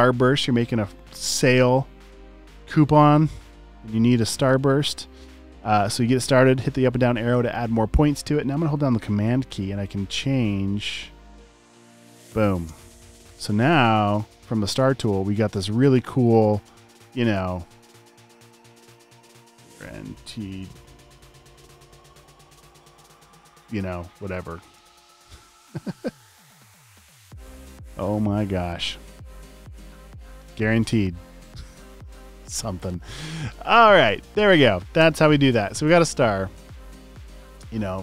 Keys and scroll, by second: 13.0 v, 19.1 typing, 20.7 typing, 23.9 v, 35.0 BackSpace.